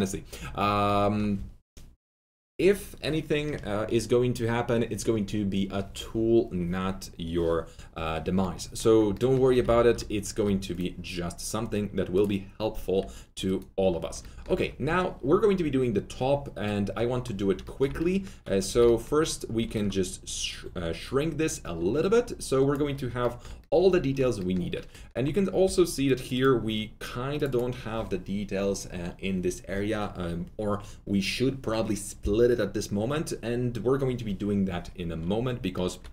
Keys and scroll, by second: 9.4 F3, 9.6 F3, 9.7 F4, 10.3 F4, 12.9 3, 18.6 r, 25.6 alt+2.